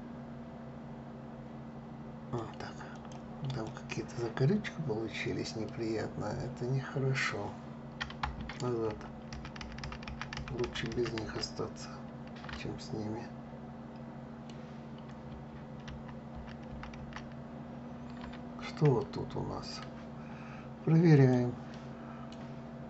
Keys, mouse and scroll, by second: 2.0 click, 2.6 click, 3.1 click, 3.8-5.0 scroll up 5, 5.3-8.3 middle drag, 8.6 ctrl+z, 9.0 ctrl+z, 9.3 ctrl+z, 9.5 ctrl+z, 9.7 ctrl+z, 10.0 ctrl+z, 10.3 ctrl+z, 10.6 ctrl+z, 10.9 ctrl+z, 12.2-15.2 middle drag, 15.5 ctrl+z, 16.0 ctrl+z, 18.2-18.6 scroll up 1, 18.7-20.8 middle drag, 20.8 click, 21.4-22.5 middle drag, 22.5-22.8 scroll up 2.